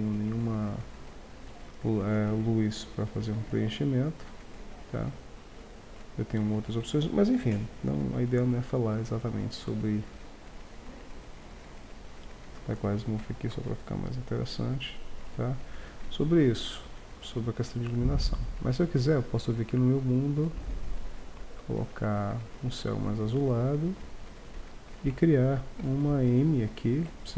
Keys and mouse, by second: 0.0 Escape, 1.4 r, 10.7-12.5 right drag, 11.9-13.5 drag, 13.5 shift+z, 15.1 shift+z, 25.8 KP_1.